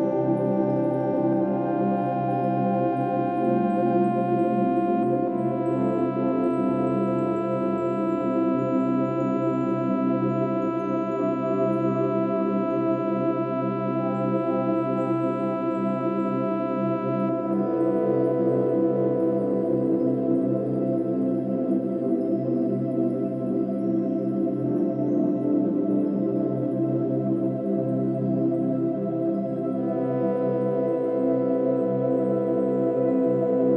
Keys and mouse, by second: 0.4 right click, 1.9 click, 2.7-3.4 alt+drag, 3.7-5.0 ctrl+alt+drag, 5.9 s, 6.5 click, 6.9 s, 7.5 click, 8.4 typing, 9.0-9.8 drag, 10.1-10.9 drag, 11.4-12.6 right drag, 12.6 click, 13.9 click, 16.4 click, 17.7 click, 17.9 click, 18.4 click, 18.6 click, 21.0-22.0 drag, 22.2-23.3 right drag, 23.3-24.5 drag, 24.5 s, 24.9 click, 26.1 drag, 27.3 7, 29.4 click, 31.9 click, 33.4 g.